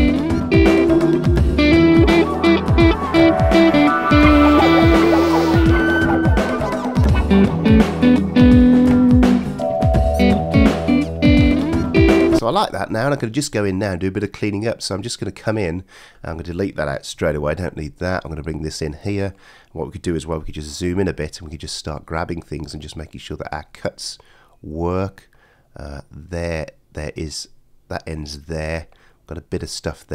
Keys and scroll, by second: 12.4 space, 17.1 BackSpace, 20.4 super+].